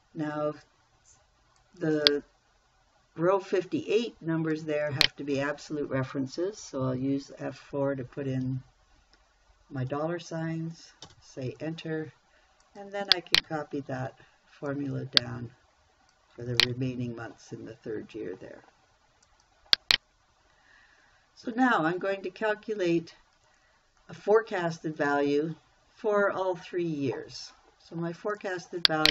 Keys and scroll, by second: 7.3 F4, 11.5 Return, 14.3 ctrl+c, 17.1 ctrl+v.